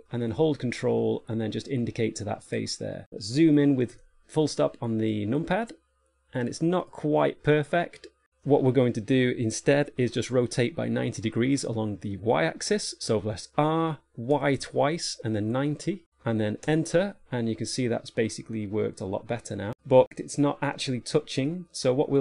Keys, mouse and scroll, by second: 4.3 KP_Decimal, 5.4 middle click, 7.1 scroll down 1, 14.0 r, 18.0 middle click, 20.0 shift+middle click, 21.6 middle click.